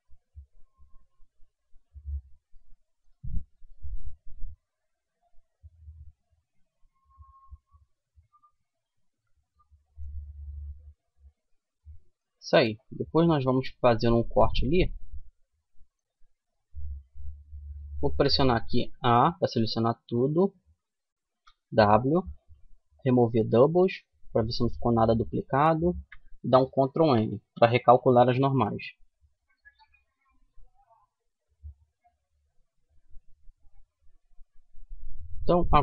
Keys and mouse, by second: 1.7 middle click, 2.4 Tab, 4.9-6.4 middle drag, 9.5 Tab, 10.1-12.7 middle drag, 11.9 a, 14.1 middle click, 15.5-17.5 middle drag, 18.3 a, 20.7 w, 26.3 ctrl+n, 27.5 a, 28.0-30.0 middle drag.